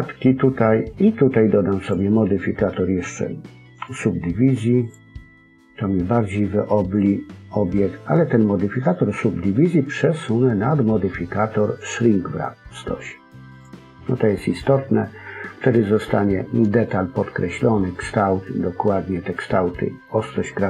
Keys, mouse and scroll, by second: 1.7 click, 13.4 click, 14.7 middle click.